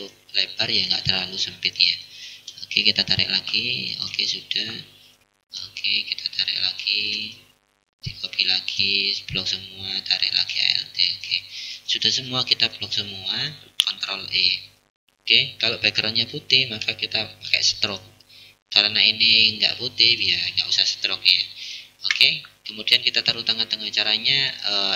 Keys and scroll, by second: 13.7 ctrl+e.